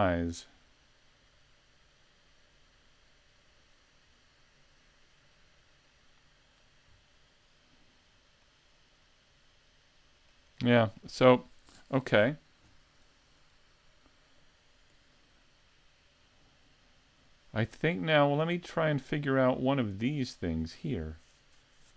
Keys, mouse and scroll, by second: 8.4 middle click, 10.6 shift+middle click, 14.1 shift+middle click, 18.6-19.0 scroll down 2, 19.0-21.9 scroll up 3, 19.5 middle click.